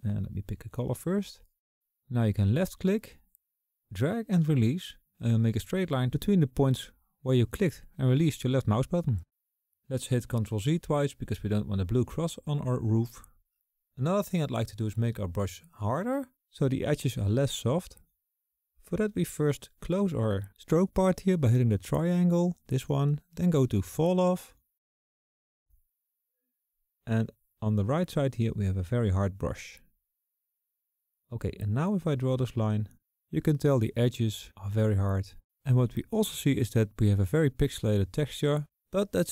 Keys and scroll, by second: 11.8 ctrl+z, 13.1 ctrl+z.